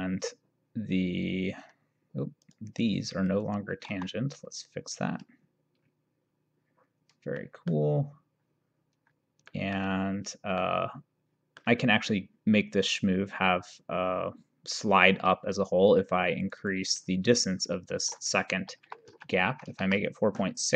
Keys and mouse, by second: 2.6 click, 4.0 t, 7.5 middle click, 9.6 middle click, 10.7 middle click, 16.5 click, 18.8 KP_4, 19.2 KP_Decimal, 19.5 KP_6.